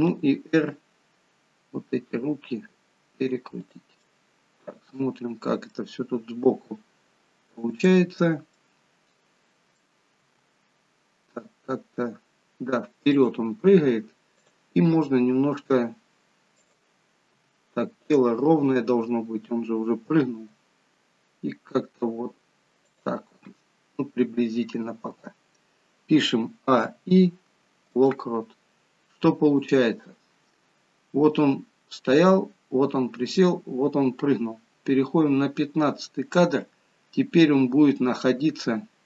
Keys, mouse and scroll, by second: 0.1 r, 4.1 middle click, 6.6 g, 8.5 middle click, 10.2 g, 14.4 click, 15.0 g, 17.4 g, 24.4-26.5 scroll down 2, 26.5 a, 26.8 i, 29.7 click.